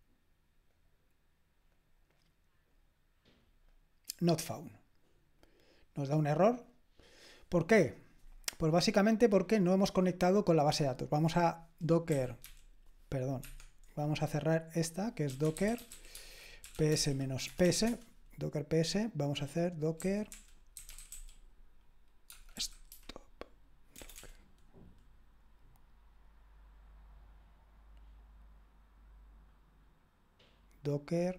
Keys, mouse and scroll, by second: 5.4-9.0 drag, 9.6-11.0 drag, 12.1-12.4 typing, 13.4 Escape, 15.2-17.9 typing, 19.7-22.9 typing, 24.0 typing.